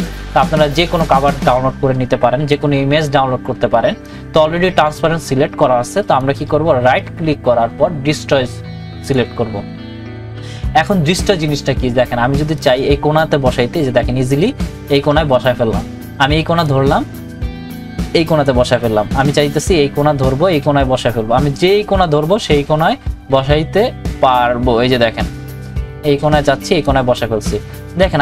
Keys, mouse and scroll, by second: 6.9 right click, 9.0 click, 12.9-28.2 drag.